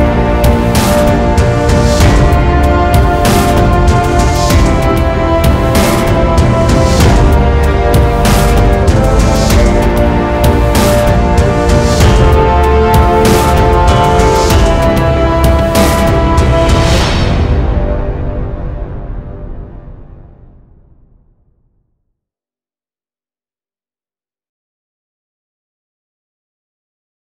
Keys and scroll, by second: 4.4 c.